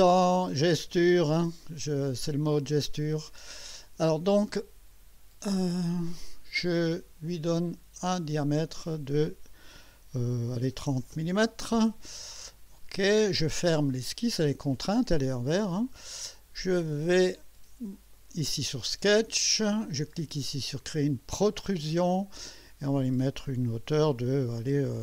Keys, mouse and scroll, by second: 6.9 click, 8.0 click, 10.9 0, 11.1 Return, 13.9 click, 15.5 click, 17.1 click, 18.1 click, 21.4 click.